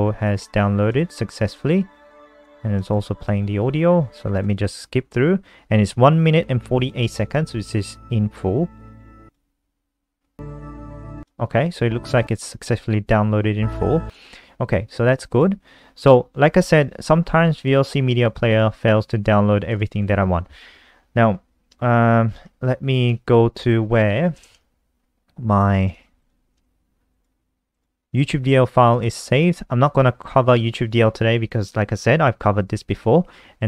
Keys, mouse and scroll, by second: 3.1 alt+click, 4.6 click, 20.2 ctrl+c, 23.3 ctrl+super+y, 23.8-25.1 typing, 26.1 click, 26.4 click, 27.3 click, 29.6 ctrl+v.